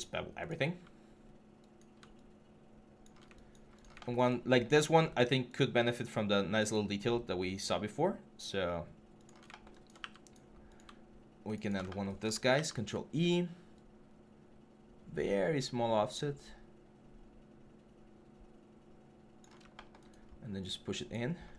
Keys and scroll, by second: 12.3 ctrl+e, 21.3 3.